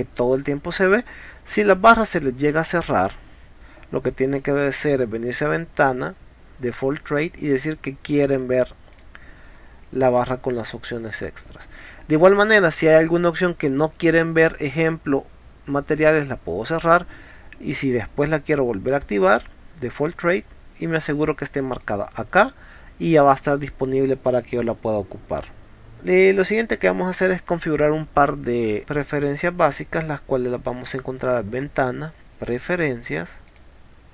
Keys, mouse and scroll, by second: 2.8 click, 4.7 click, 8.9 click, 16.0 click, 19.0 click, 21.9 click, 27.1 click, 30.9 click, 33.5 click.